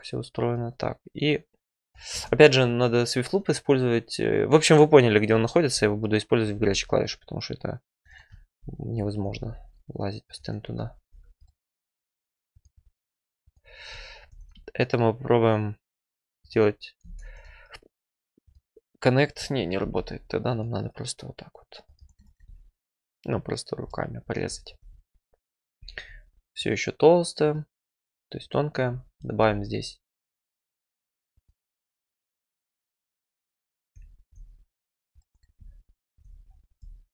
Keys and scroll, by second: 2.1 ctrl+z, 6.5 ctrl+r, 9.3 ctrl+r, 11.1 1, 17.0 ctrl+z, 19.8 alt+c, 24.9 `, 29.3 ctrl+r.